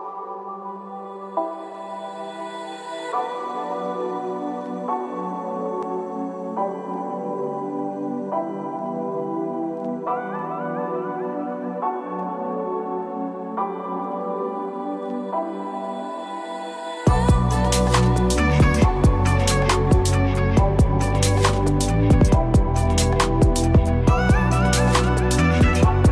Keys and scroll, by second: 0.8 ctrl+Return, 14.3 ctrl+-.